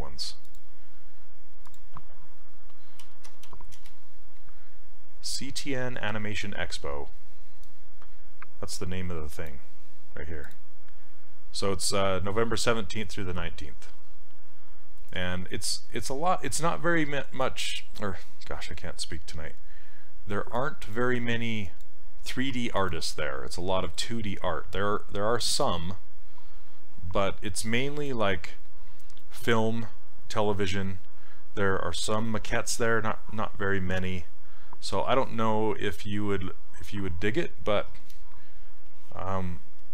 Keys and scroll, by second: 2.8-4.0 typing.